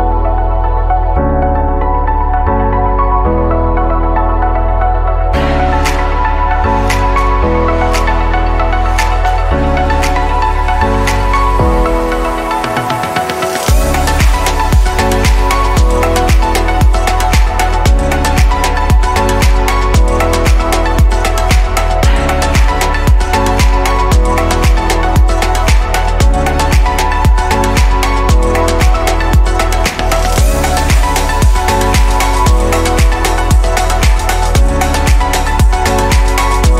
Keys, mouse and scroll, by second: 2.0-5.4 middle drag, 5.4 click, 6.1-7.8 middle drag, 7.8 click, 9.7 shift+d, 11.0 click, 13.9 click, 14.3-15.1 shift+middle drag, 15.1-16.7 scroll up 2, 17.4 s, 25.3-25.9 scroll up 2, 25.9-27.5 shift+middle drag, 27.5 click, 33.0 click.